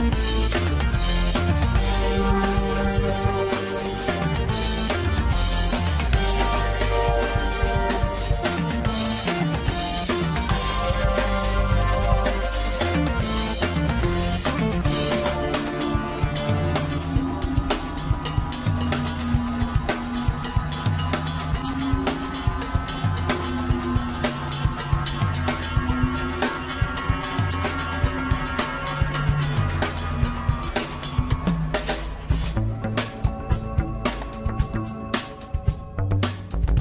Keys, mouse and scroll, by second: 0.0-0.4 scroll down 3, 0.4-1.0 scroll up 1, 1.0 Tab, 1.9-3.9 shift+middle drag, 3.9-4.5 scroll up 4, 7.2 scroll up 1, 7.3-7.9 scroll down 3, 7.9-10.3 middle drag, 10.3 scroll up 2, 13.2-17.7 drag, 17.7 KP_1, 19.0 scroll down 1, 19.9-21.5 shift+middle drag, 21.5 scroll up 1, 22.0 shift+middle click, 23.0 scroll down 1, 23.6 Tab, 24.6 Tab, 26.3-29.1 middle drag, 29.1 shift+d, 32.3 click, 33.9 click, 36.3-36.8 drag.